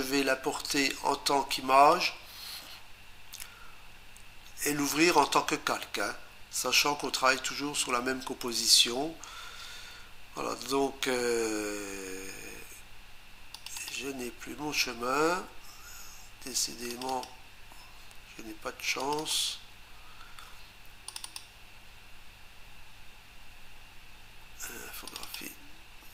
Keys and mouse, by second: 1.5 click, 4.9 click, 13.5 click, 13.8 click, 13.9 double click, 16.9 click, 17.1 click, 17.2 double click, 19.0 click, 19.2 click, 19.3 double click, 21.1 click, 21.2 click, 21.4 double click, 25.1 click, 25.2 click, 25.3 double click.